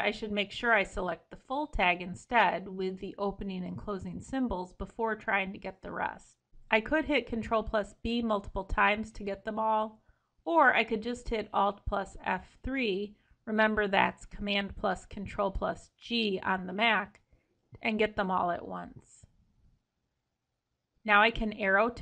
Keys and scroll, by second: 3.2 ctrl+shift+Left, 4.6 ctrl+shift+Left, 8.9 ctrl+b, 12.2 alt+F3.